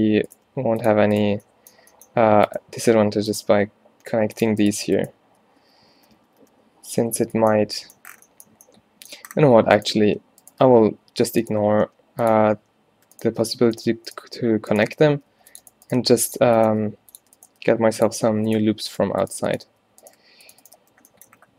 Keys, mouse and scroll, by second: 0.0-0.5 typing, 3.1 g, 3.6 e, 5.9 ctrl+z, 6.1 ctrl+z, 6.3 ctrl+z, 6.5 ctrl+z, 7.2 a, 10.7 alt+w, 11.9 g, 13.5 f, 14.9 f, 15.4 ctrl+r, 16.1 g, 16.8 g, 17.7 g, 19.8 f, 20.1 right click.